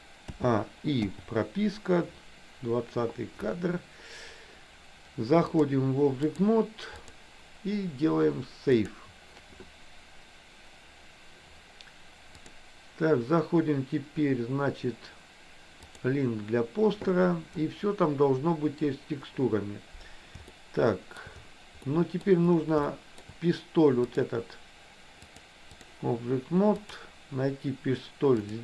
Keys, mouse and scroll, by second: 0.4 a, 1.1 i, 5.6-6.6 drag, 7.0-9.0 drag, 12.5-18.4 drag, 20.6 shift+middle click, 21.9 middle click, 23.0 shift+middle click, 24.2 click, 25.3 click, 26.9 click.